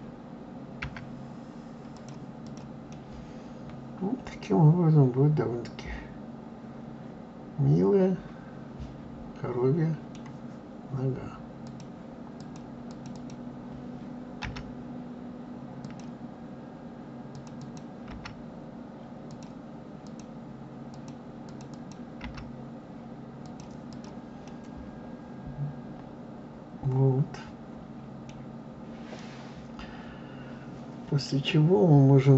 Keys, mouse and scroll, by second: 0.8 s, 2.4 click, 2.8-5.8 middle drag, 11.6 click, 12.3 click, 12.9 click, 13.1 click, 14.4 g, 17.3 click, 17.5 click, 18.0 g, 20.0 click, 20.9 click, 21.4 click, 21.7 click, 22.2 g, 23.8 click, 24.4-27.4 middle drag, 28.4-29.0 scroll down 2, 29.1-32.3 middle drag.